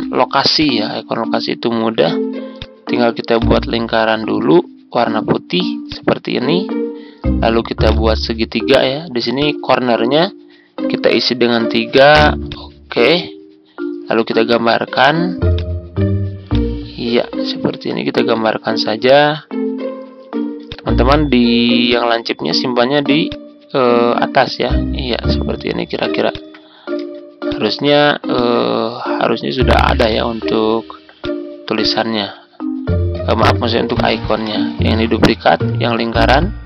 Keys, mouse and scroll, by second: 0.0-0.1 typing, 0.5-4.3 drag, 5.8-10.7 drag, 11.4 3, 12.4-26.1 drag, 26.2 shift+click, 26.9 typing, 28.6 ctrl+scroll up 1, 30.0-32.7 drag, 34.2 ctrl+d, 35.1 click, 36.0 ctrl+z.